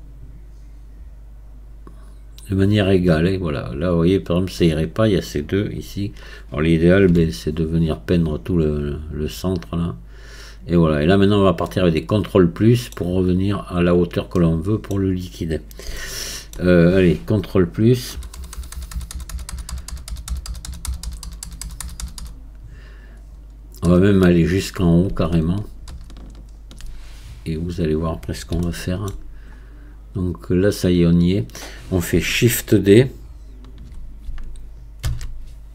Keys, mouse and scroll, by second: 11.7-13.1 middle drag, 13.1-14.1 scroll down 7, 14.4-15.4 middle drag, 15.4-16.0 scroll up 1, 16.0-18.2 shift+middle drag, 18.2 ctrl+KP_Add, 18.4-21.1 ctrl+KP_Add, 27.5-28.7 scroll up 3, 28.7 shift+middle click, 29.6 scroll up 3, 30.7-34.2 scroll down 4, 35.1 shift+d.